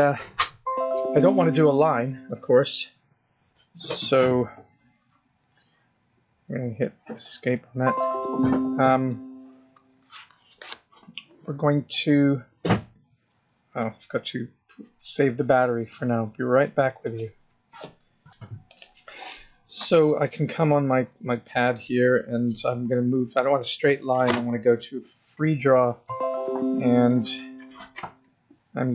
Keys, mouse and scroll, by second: 22.5 click, 22.8 click, 26.6 click.